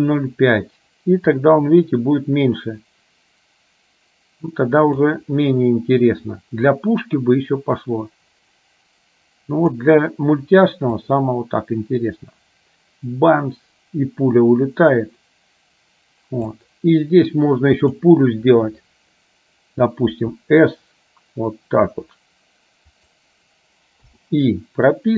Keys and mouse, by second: 1.4-5.3 drag, 6.9-9.8 drag, 11.2-16.8 drag, 17.8 click, 20.3 s.